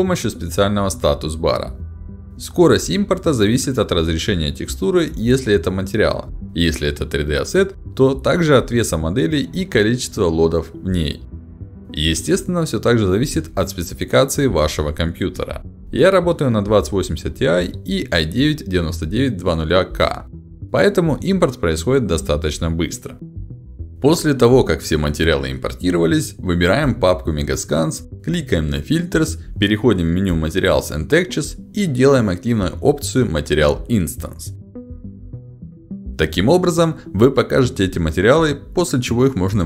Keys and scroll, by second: 29.8 ctrl+alt+d.